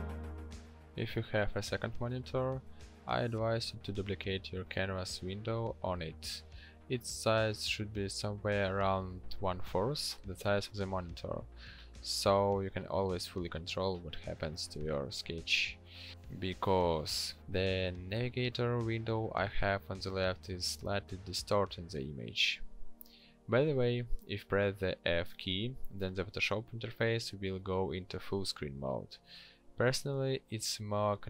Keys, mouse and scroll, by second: 1.0 f, 21.3 f.